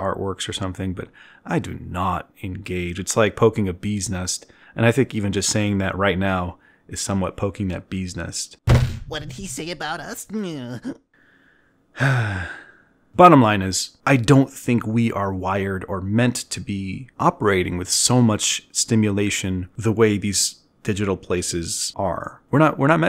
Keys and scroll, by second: 1.3-2.6 typing, 2.3 ctrl+alt+1, 2.6 ctrl+alt+1.